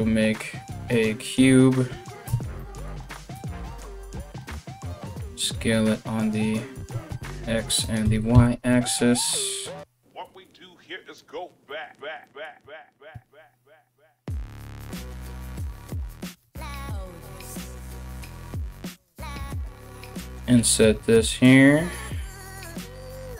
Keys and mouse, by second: 1.8 Tab, 2.9 s, 4.5 s, 6.5 s, 7.6 s, 9.8 g, 16.0 3, 16.3 right click, 17.5 right click, 18.5 right click.